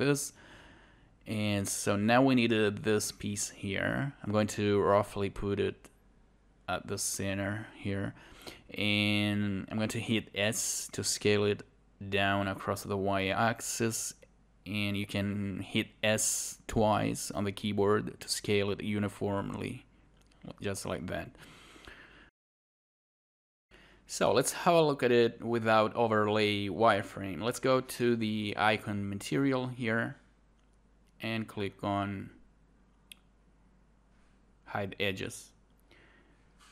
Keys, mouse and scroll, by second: 0.2 shift+click, 2.2 alt+click, 5.1 alt+click, 8.1 scroll up 1, 9.2 shift+g, 9.7 scroll up 1, 11.4-16.1 drag, 17.3 click, 17.9 alt+click, 18.6 alt+click, 21.0 alt+click, 24.2 alt+click, 24.5 alt+click, 25.0 alt+click, 27.1 alt+right click, 27.3 alt+click, 29.2 alt+right click, 29.4 alt+click, 36.4 alt+right click, 36.6 alt+click.